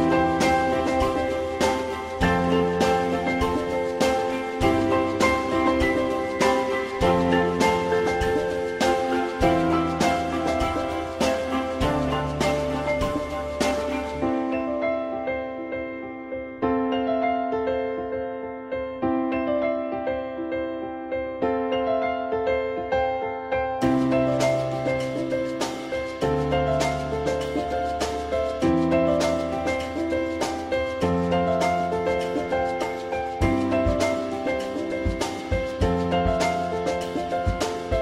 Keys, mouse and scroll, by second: 0.1 click, 3.3 shift+click, 4.3 shift+double click, 4.8 r, 6.7 click, 8.0 w, 10.0 click, 10.9 alt+middle click, 15.5 alt+middle click, 23.8 Delete, 24.8 alt+middle click, 26.5 alt+middle click, 32.1 alt+middle click, 35.8 alt+middle click.